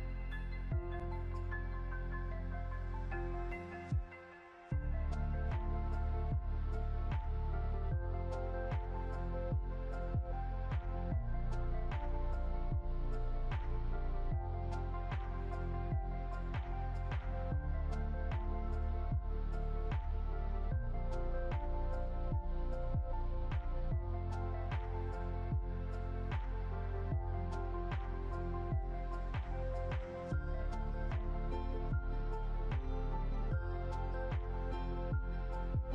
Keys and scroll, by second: 9.1 ctrl+0, 11.2 ctrl+g, 12.7 ctrl+alt+2, 15.6 ctrl+g, 32.1 Right, 32.9 Down, 33.3 Right.